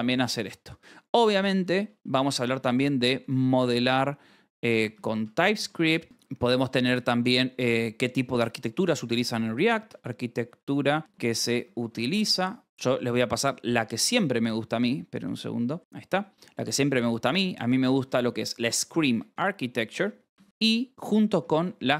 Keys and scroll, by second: 0.7-6.9 typing, 6.2 Escape, 8.8-13.9 typing, 13.8 Escape, 15.5-21.9 typing.